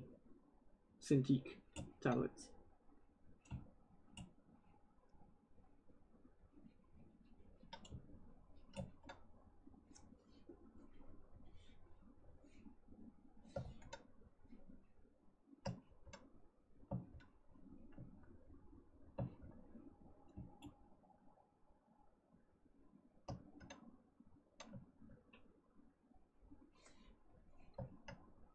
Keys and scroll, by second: 13.5 ctrl+z.